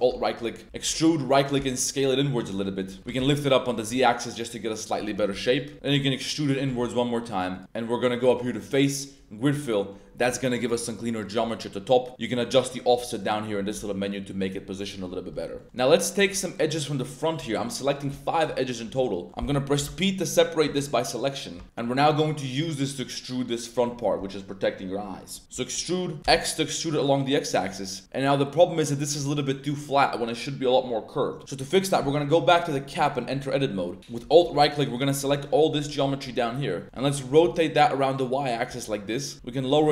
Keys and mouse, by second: 0.2 click, 0.7 e, 1.2 right click, 1.5 s, 2.7 click, 3.1 z, 4.0-5.1 middle drag, 5.3 s, 5.5 click, 5.7 e, 6.6 s, 7.6 Tab, 8.2-9.1 drag, 9.6 middle drag, 12.4 click, 13.8 middle click, 14.8 middle drag, 15.6 middle click, 15.7 a, 16.1 click, 16.5 shift+click, 16.8 shift+drag, 17.2 shift+click, 17.3 shift+middle drag, 17.8 middle click, 18.3 shift+click, 18.5 middle drag, 19.0-19.3 middle drag, 19.7 p, 20.6 Tab, 21.1 click, 21.5 Tab, 21.6 middle click, 21.6 1, 23.6 middle click, 25.2 middle click, 25.5 e, 26.2 x, 27.8-29.0 drag, 28.1 Tab, 29.3 click, 29.7-30.2 drag, 31.4 click, 31.4 Tab, 32.0 right click, 32.9 middle click, 34.0 alt+Tab, 34.0 alt+click, 34.5 shift+z, 34.8 alt+shift+click, 35.4 alt+shift+middle click, 35.9 z, 36.1 click, 36.4 click, 36.4 z, 36.8 r, 37.3 y, 38.5 click, 38.7 z, 38.8 click, 39.7 click, 39.8 g.